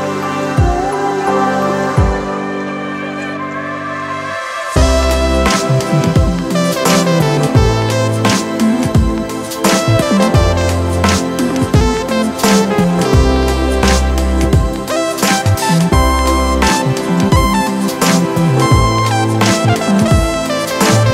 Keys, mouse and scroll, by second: 3.0 ctrl+click.